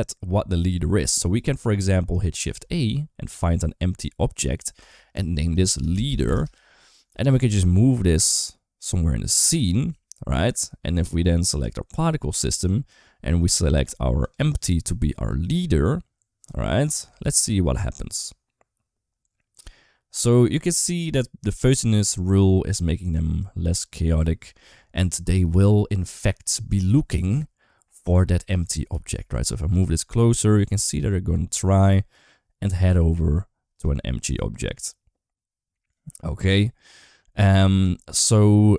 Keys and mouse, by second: 2.2 shift+a, 5.0 F2, 7.3 g, 11.3 click, 16.9 space, 28.7 g.